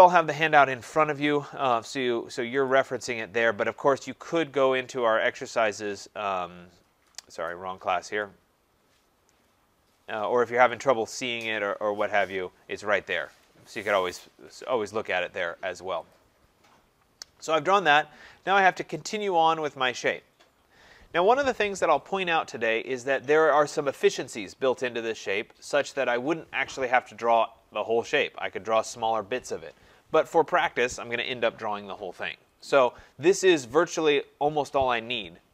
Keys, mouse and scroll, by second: 0.6 click, 2.8 click, 8.2 click, 10.9 click, 12.0 scroll, 13.5 click, 16.2 click.